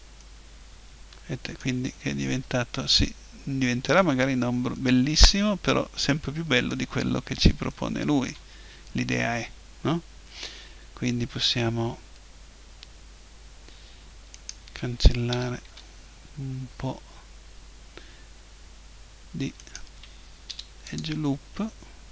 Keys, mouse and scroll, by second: 2.0-6.6 middle drag, 6.9-11.7 middle drag, 14.3-16.2 right drag, 15.3 Delete, 19.6-21.3 right drag, 20.5 Delete.